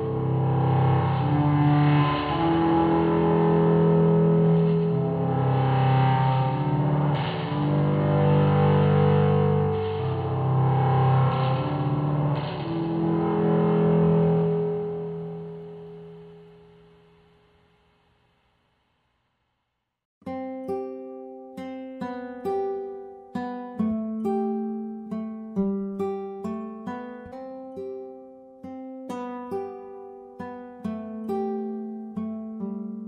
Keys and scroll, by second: 7.1 ctrl+e.